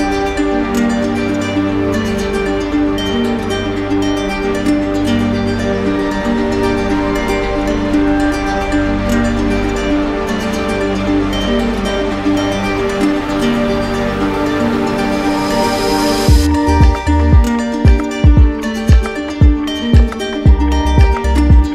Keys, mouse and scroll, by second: 10.6-11.7 drag, 17.9 click, 18.2 ctrl+z, 20.2-21.2 right drag.